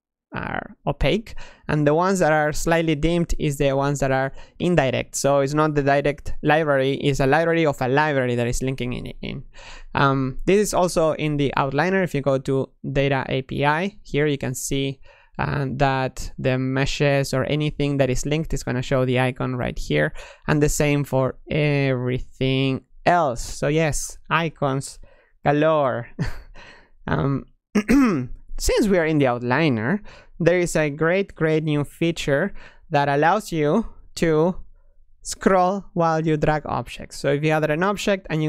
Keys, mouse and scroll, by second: 11.6-14.6 drag, 15.1-16.7 drag, 17.9-26.5 middle drag, 31.1-33.2 drag, 37.3 click.